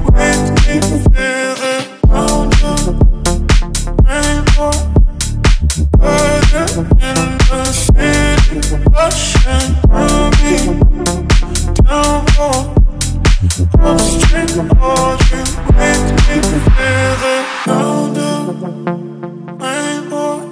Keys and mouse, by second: 0.9 shift+s, 6.3 KP_1, 7.5-7.9 ctrl+middle drag, 8.3-8.8 shift+middle drag, 12.8 shift+z, 13.6 click, 14.8 ctrl+click, 16.0 shift+z, 17.3 x, 18.9 s.